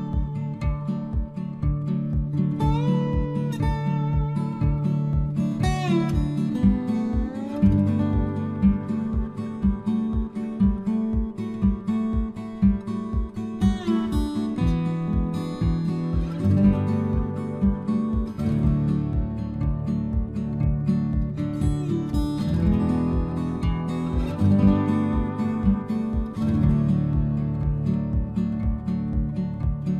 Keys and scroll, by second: 0.0 Return, 26.9 ctrl+v.